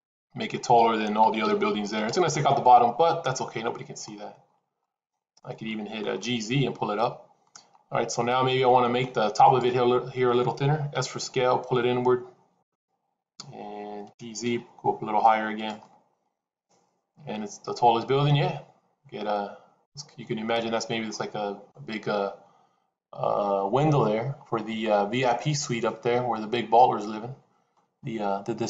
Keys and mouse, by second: 1.1 s, 2.5-3.9 middle drag, 4.7 middle click, 5.6 shift+middle click, 6.0-7.4 middle drag, 8.5 middle click, 9.4 click, 10.9 s, 13.9 g, 15.7-19.8 middle drag, 21.0 middle click, 25.3-27.7 middle drag.